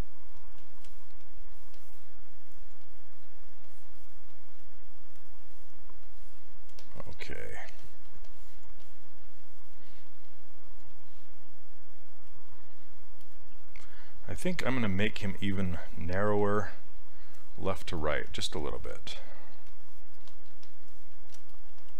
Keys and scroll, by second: 16.3 s, 18.3 s, 21.7 s.